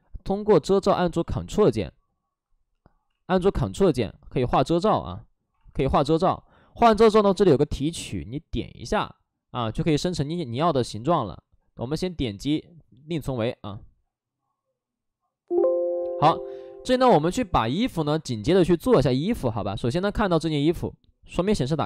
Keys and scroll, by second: 0.8 alt+s, 3.0 ctrl+z, 4.2 ctrl+z, 11.1 ctrl+z, 12.0 ctrl+z, 16.8 alt+s, 19.3 alt+s.